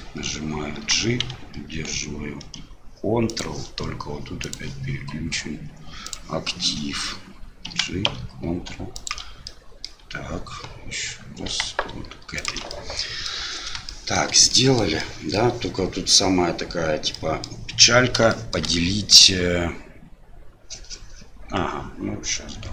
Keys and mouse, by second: 4.6-6.7 drag, 9.6 middle click, 12.8 middle click, 14.0 shift+middle click, 14.6 middle click, 15.1 middle click, 17.2 middle click, 18.4 shift+middle click.